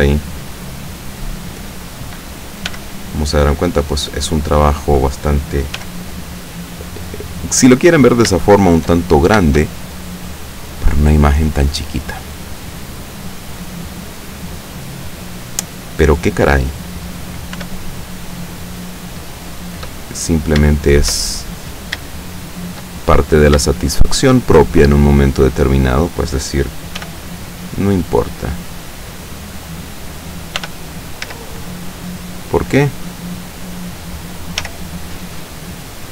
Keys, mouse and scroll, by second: 1.2 click, 2.7 g, 3.8 click, 4.2-5.0 middle drag, 5.0-5.8 scroll down 1, 5.8-6.4 scroll down 1, 5.8 g, 6.4-6.7 scroll down 1, 6.8 click, 7.1-7.9 middle drag, 7.9 scroll down 1, 8.0-8.3 scroll up 1, 8.3 shift+scroll down 1, 8.4 shift+middle click, 8.8-9.4 shift+scroll up 2, 10.4-12.1 drag, 14.4-16.2 middle drag, 17.6 r, 18.9 click, 19.5 scroll down 1, 19.9-20.7 middle drag, 20.9-22.2 shift+middle drag, 22.3-23.7 shift+middle drag, 23.9-25.1 shift+middle drag, 27.1 g, 29.3 click, 30.7 r, 31.3 z, 32.6 click, 34.7 g.